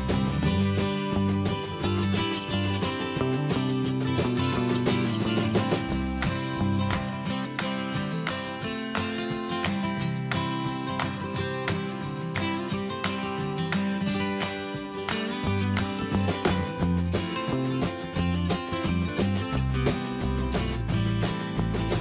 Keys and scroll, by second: 11.0 alt+Tab, 12.9 ctrl+c, 14.6 alt+Tab, 15.6 ctrl+c, 15.8 alt+Tab, 16.6 ctrl+v, 17.0 Escape.